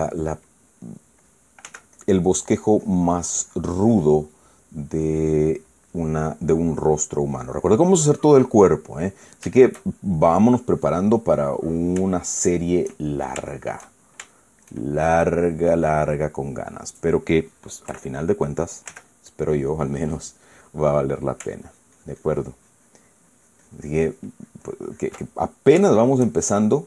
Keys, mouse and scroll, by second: 0.1 middle click, 1.4 middle click, 1.6 middle click, 2.4 f, 2.7 click, 3.2 click, 5.0 middle click, 6.1 middle click, 7.0-8.5 drag, 8.7 click, 9.6 middle click, 10.2 shift+middle click, 11.2 shift+click, 11.9 middle click, 13.1-16.5 shift+middle drag, 18.6 KP_Add, 19.6 f, 20.0 click, 20.8-22.1 middle drag, 22.4-26.0 ctrl+drag, 26.1-26.8 ctrl+middle drag.